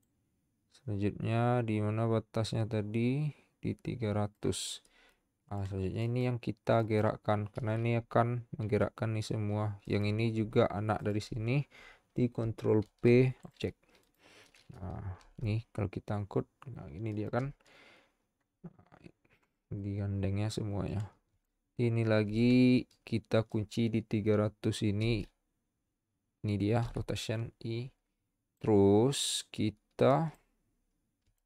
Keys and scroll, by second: 12.8 ctrl+p, 15.2 g.